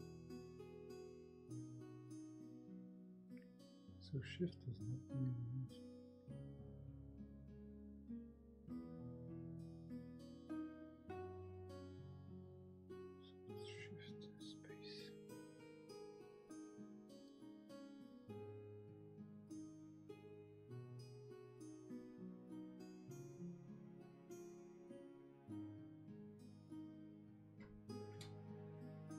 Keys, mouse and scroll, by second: 0.9 ctrl+z, 5.4 space, 8.0 space, 13.4 space.